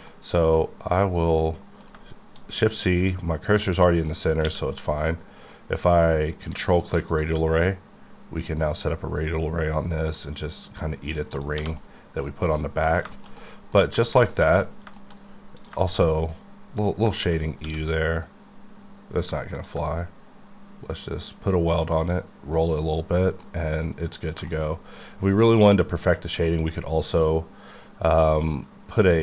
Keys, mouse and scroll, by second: 0.2-1.2 scroll down 4, 1.2 middle click, 3.7 middle click, 4.1 scroll down 1, 4.5 q, 7.1 ctrl+click, 8.3-10.8 scroll up 11, 10.8-11.3 scroll up 1, 11.6 1, 11.8 middle click, 12.8 middle click, 13.5 middle click, 13.8 scroll down 2, 14.1 shift+middle click, 15.2 shift+scroll up 2, 15.7 shift+click, 15.9 shift+middle click, 16.0-16.8 scroll up 4, 17.1 shift+click, 17.2 shift+middle click, 17.4 scroll down 2, 17.6 q, 19.6 ctrl+click, 20.3-22.0 scroll up 2, 22.0 click, 22.6 middle click, 23.5 middle click, 24.3 scroll down 2, 24.5 shift+middle click, 24.8 scroll up 4, 26.1-26.5 scroll down 3, 26.5 middle click.